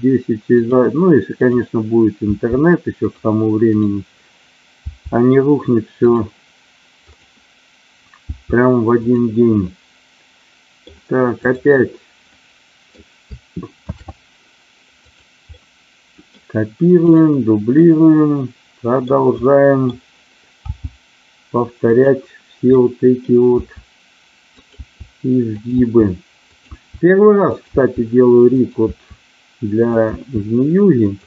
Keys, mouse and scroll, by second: 1.5 click, 2.2 g, 3.0 click, 3.7 click, 4.8 g, 5.9 click, 7.1 click, 8.2 g, 8.9 click, 9.6-10.8 middle drag, 11.4 click, 12.3 middle click, 13.9 shift+d, 15.0 click, 15.5 middle click, 17.7-19.0 middle drag, 19.4 middle click, 20.6 g, 21.8 click, 22.8 middle click, 23.5 e, 24.5 click, 24.9 e, 25.5 click, 25.6 e, 26.5 click, 26.6 e, 27.4 click, 27.6 e, 28.5 click, 28.9 e, 29.9 click, 30.0 e, 31.0 click.